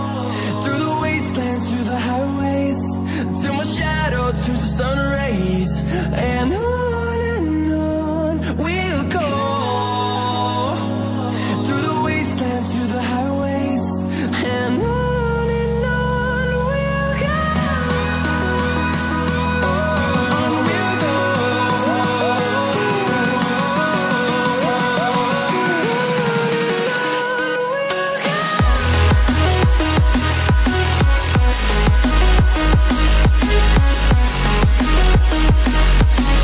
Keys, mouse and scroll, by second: 1.3 typing, 2.4-3.5 typing, 3.9 click, 7.5 typing, 9.1 click, 13.4 Up, 13.5 Up, 14.7 click, 15.4 scroll up 1, 16.0 scroll down 1, 16.8 scroll, 17.5 shift+click, 22.3 scroll down 1, 24.2 click, 33.4 double click, 33.8 click, 36.1 scroll up 1.